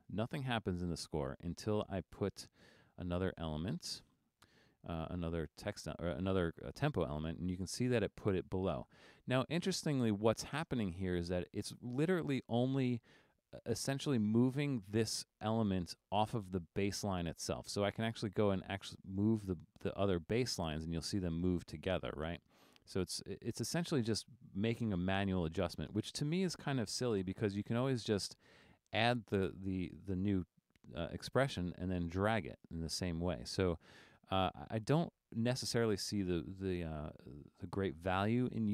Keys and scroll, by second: 22.3 super+z, 27.1 BackSpace.